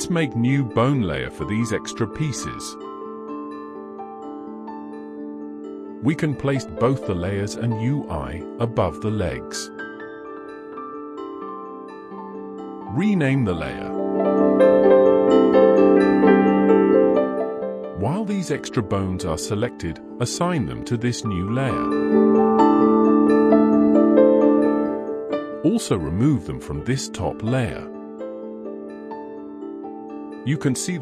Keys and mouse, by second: 4.7 click, 6.1 click, 7.9 middle drag, 8.5 middle drag, 10.2 click, 10.4-21.6 drag, 23.1 click, 25.1 click, 26.2 click, 27.7 middle drag, 28.2 shift+middle drag, 28.6-29.6 middle drag, 30.0 middle drag, 30.6-31.0 middle drag.